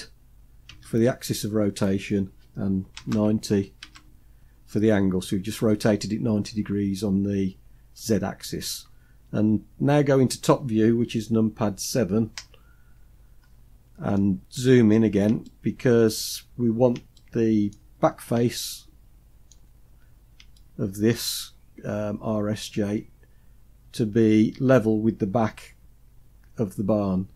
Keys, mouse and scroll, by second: 11.9 KP_7, 12.6-13.7 scroll down 4, 13.7 shift+middle click, 14.3-15.0 scroll up 3, 15.0 shift+middle click, 16.0-16.7 scroll up 3, 16.7 shift+middle click, 17.5-18.0 scroll up 2, 18.0 shift+middle click, 19.3-20.1 scroll up 3, 20.1 shift+middle click.